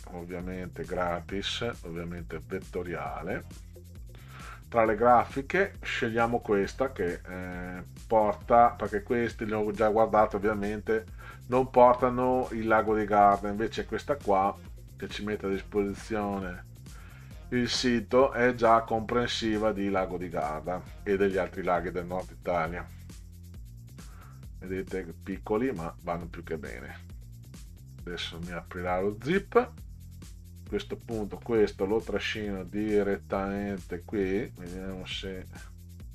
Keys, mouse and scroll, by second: 1.0 click, 2.2 click, 2.9 scroll up 2, 4.0 scroll down 2, 13.8 click, 19.7 click, 24.3 click.